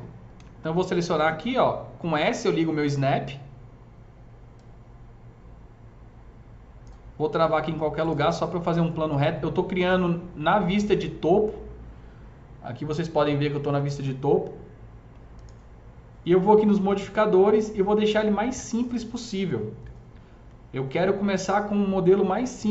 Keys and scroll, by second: 0.3 s.